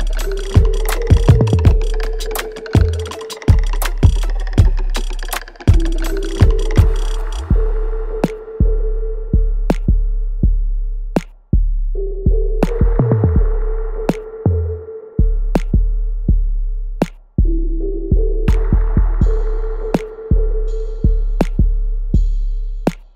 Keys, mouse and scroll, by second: 3.3 alt+click, 5.8 alt+click, 7.4 alt+click, 8.8 alt+middle click, 9.1 alt+right click, 9.6 alt+click, 11.7 shift+right click, 12.1 alt+click, 16.0-17.4 alt+drag, 18.2 alt+right click, 18.6-20.7 alt+drag, 21.1 alt+right click, 22.0 shift+click.